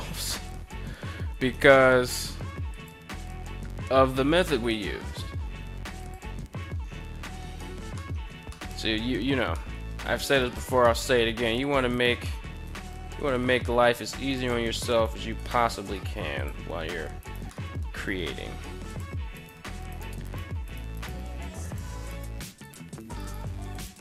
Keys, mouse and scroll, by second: 0.8 s, 1.0 x, 2.2 click, 2.7 g, 3.7 y, 5.5 click, 7.0 a, 7.2 a, 7.5 middle click, 8.1 middle click, 9.0 middle click, 9.9 right click, 10.3 middle click, 11.4 right click, 11.7 middle click, 12.2 g, 13.9 click, 14.5 right click, 14.6 g, 14.9 click, 15.4 right click, 15.6 g, 15.9 click, 16.7 right click, 17.0 middle click, 17.4 g, 18.4 click, 18.8 right click, 19.0 g, 19.4 right click, 19.7 right click, 19.9 g, 20.2 right click, 20.4 right click, 20.7 g, 21.2 click, 21.6 right click, 21.8 g, 22.2 click, 22.6 right click, 22.9 g, 23.2 click, 23.7 right click, 23.9 g.